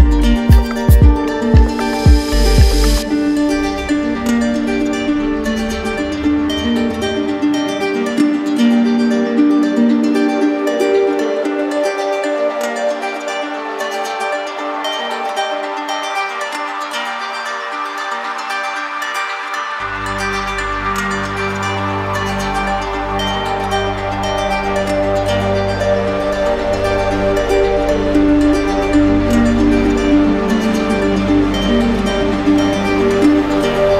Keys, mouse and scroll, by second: 3.2 click, 3.7 shift+click, 4.4 click, 4.8 ctrl+click, 5.7 alt+click, 7.4 alt+click, 9.5 ctrl+click, 9.9 alt+click, 11.4 ctrl+click, 11.9 alt+click, 17.4 click, 18.2 click, 18.7 ctrl+click, 19.5 ctrl+click, 21.1 ctrl+click, 21.5 ctrl+click, 24.0 click, 24.6 ctrl+click, 26.3 ctrl+click, 26.7 alt+click, 27.3 click, 27.9 alt+click.